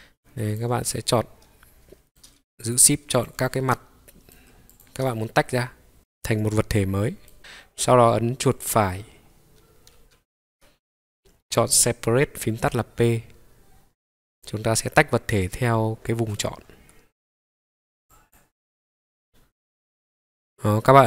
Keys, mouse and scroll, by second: 0.9-2.6 middle drag, 2.6 shift+click, 3.1 shift+click, 3.7 middle click, 4.7 shift+click, 5.2-7.3 middle drag, 7.4 click, 8.5-18.4 right drag, 19.1 scroll down 1, 19.2-19.9 scroll up 1.